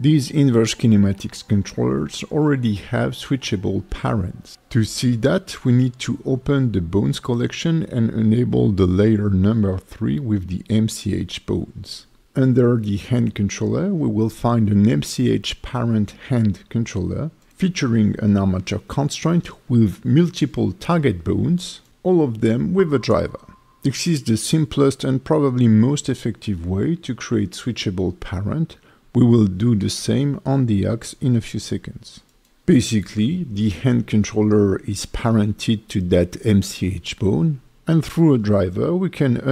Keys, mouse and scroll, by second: 0.2 right click, 3.7 click, 7.2 click, 7.8-8.1 scroll up 2, 8.3 alt+middle click, 9.4 click, 14.2 click, 17.4-20.9 scroll down 1, 24.5-25.3 scroll down 1, 27.4 click, 28.1 click, 28.6 g, 29.3 right click, 30.8 click, 32.5 g, 33.4 right click.